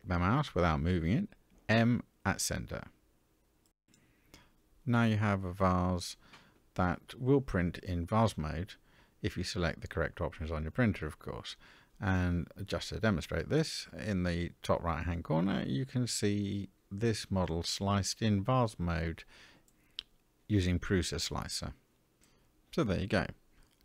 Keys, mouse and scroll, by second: 0.4 m, 4.0 Tab, 4.9-7.5 middle drag, 8.0-8.4 scroll down 1, 8.4-9.2 middle drag.